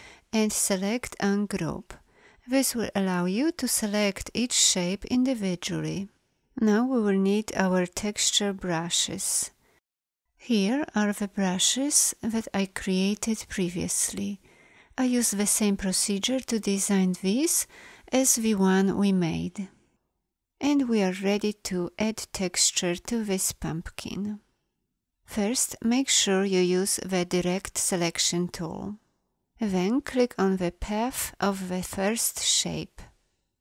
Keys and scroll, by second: 25.9 a.